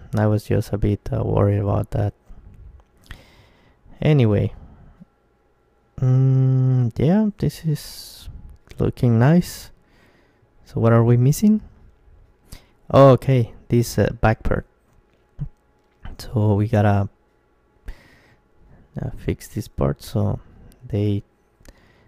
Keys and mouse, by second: 1.4 click, 1.5 middle click, 2.5-6.5 middle drag, 9.5-10.5 right drag, 10.4 ctrl+KP_1, 12.1-14.7 middle drag, 17.3 Tab, 18.0-22.0 middle drag.